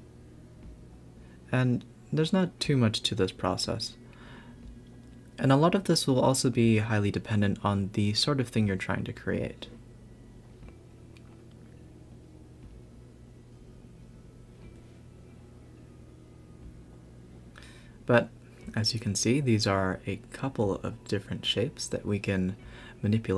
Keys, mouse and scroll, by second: 0.8 x, 1.6 Tab, 2.1-3.6 scroll down 1, 3.6 shift+d, 4.4 Tab, 5.5 click, 5.7 click, 6.5 s, 7.5 click, 7.9 click, 8.3 Tab, 8.4 click, 8.7 Tab, 9.0 click, 9.5 s, 10.1 Tab, 10.3-10.8 scroll down 4, 10.8 scroll up 2, 11.0 a, 11.2 a, 11.8 click, 12.2 click, 12.6 g, 13.6 click, 13.8 g, 14.4 a, 14.6 a, 14.7-15.3 scroll up 4, 15.3 click, 15.6-16.0 scroll up 5, 16.4 shift+d, 18.9 Tab, 20.5 i.